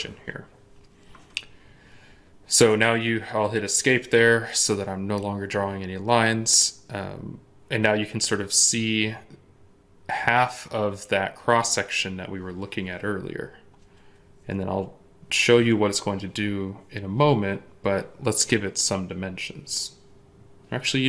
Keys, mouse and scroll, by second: 2.5 Escape.